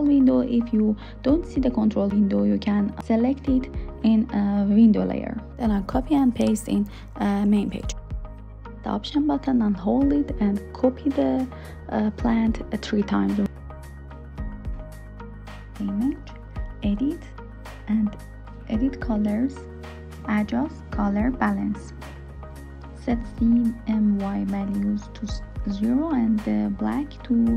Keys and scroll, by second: 3.4 super+c, 4.5 super+v.